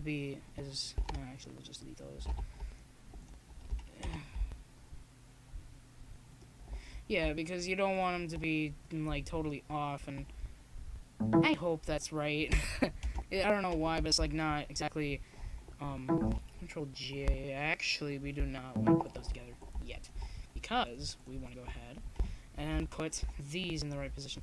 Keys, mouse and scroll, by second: 1.6 m, 3.9-5.6 drag, 6.0 middle click, 6.4 click, 6.4 KP_0, 6.7 middle click, 8.1 middle click, 8.4-10.3 drag, 10.6 m, 13.5-15.1 drag, 15.1-16.5 middle drag, 16.5-18.3 drag, 18.3 middle click, 18.9-20.9 drag, 20.9 middle click, 21.2 g, 21.5-22.5 drag, 22.7 click, 23.0 a, 23.5 middle click, 23.6 click.